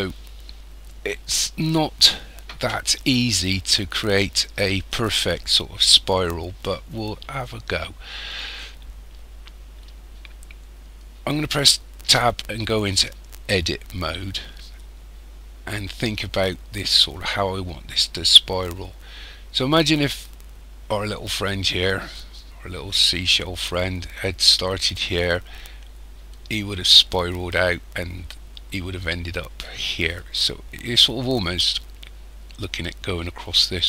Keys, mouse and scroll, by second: 12.0 Tab.